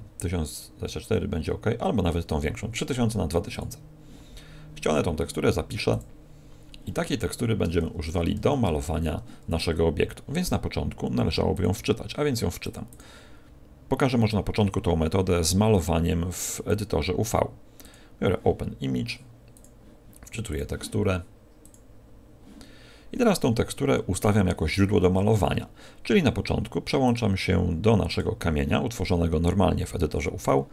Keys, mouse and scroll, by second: 11.5 click, 12.8 click, 16.6 click, 21.8 click, 27.0 click.